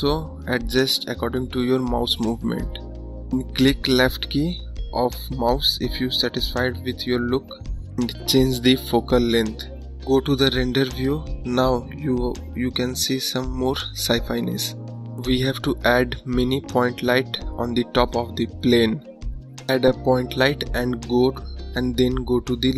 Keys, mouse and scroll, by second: 1.8-4.4 drag, 4.4-5.1 scroll up 2, 5.1-5.5 scroll up 1, 5.7-6.3 scroll down 1, 7.3 scroll up 2, 8.1 scroll down 1, 9.4 click, 13.9 click, 21.6 `.